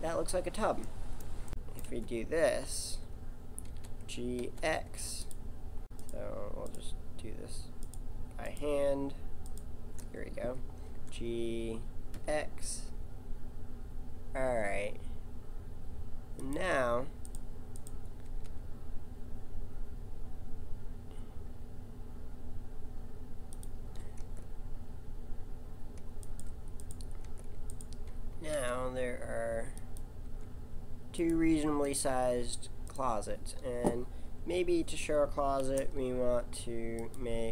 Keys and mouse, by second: 1.5 KP_7, 1.9 z, 3.7 g, 5.8-10.9 right drag, 10.9 g, 11.2 right click, 17.3-20.6 right drag, 18.3 g, 24.2 Tab, 26.2-29.4 right drag, 27.2 Tab, 28.5 g, 30.3 g, 31.9-34.7 drag, 35.6 shift+a.